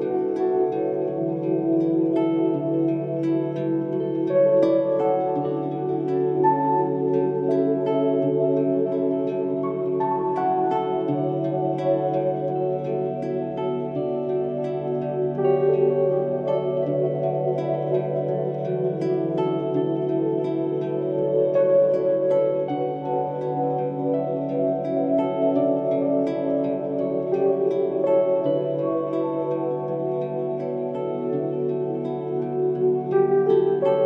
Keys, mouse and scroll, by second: 2.6-3.3 typing, 2.8 click, 7.4-8.2 typing, 7.7 click, 18.4 click, 19.4-20.2 typing, 21.4 click, 23.8-24.6 typing, 25.9-27.0 typing, 26.1 scroll down 1, 27.0-30.9 drag, 30.9 scroll down 1, 31.4-32.2 typing, 31.7-34.0 drag.